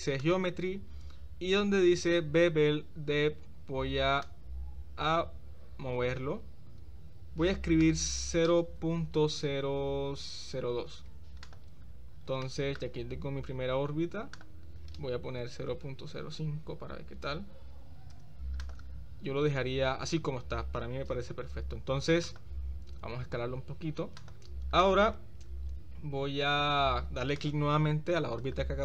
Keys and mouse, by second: 0.2 click, 4.2-7.5 drag, 8.0-11.5 drag, 12.4 shift+middle click, 14.4-18.2 drag, 15.9 0, 18.7 click, 22.3 click, 23.1 s, 27.4 click.